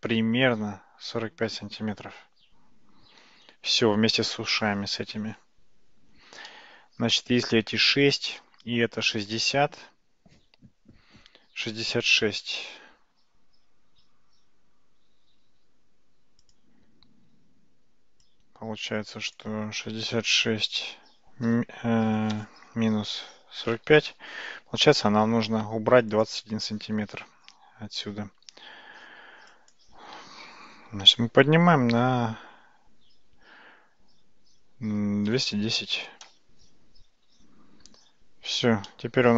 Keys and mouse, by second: 6.5-7.1 middle drag, 28.4 Tab, 29.8 click, 31.0 g, 37.5 Tab, 39.0-39.3 middle drag.